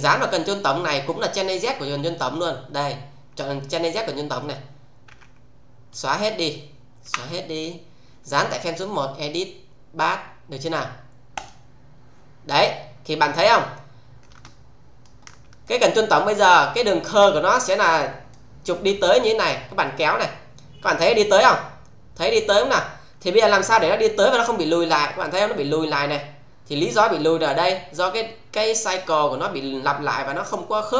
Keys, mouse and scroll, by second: 0.4 click, 2.0 click, 5.0 f, 5.9-6.5 click, 7.0 Delete, 9.2 click, 11.3 click, 12.5-13.1 scroll down 1, 14.4-15.0 alt+middle click, 17.2-18.2 alt+middle click, 19.8-26.6 click.